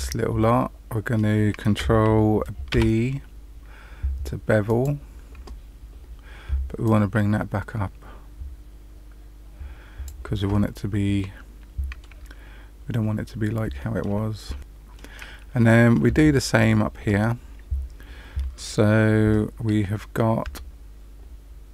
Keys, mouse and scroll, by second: 0.3 middle click, 2.7 ctrl+b, 6.8 click, 11.1 middle click, 12.3-13.6 scroll up 1, 13.7 shift+middle click, 15.5 middle click, 16.1 shift+middle click, 20.6 Tab.